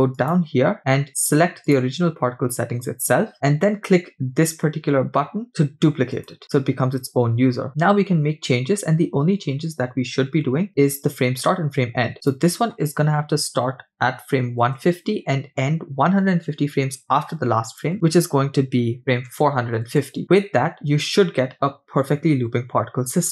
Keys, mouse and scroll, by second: 0.2-3.3 drag, 6.1 click, 12.2-16.2 drag, 17.7-20.2 drag.